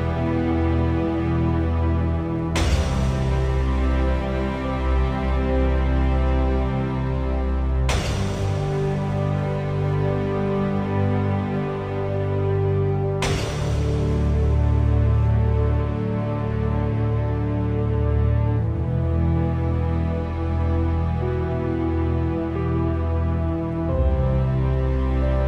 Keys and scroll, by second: 0.6 2, 1.0 Return, 17.8 v.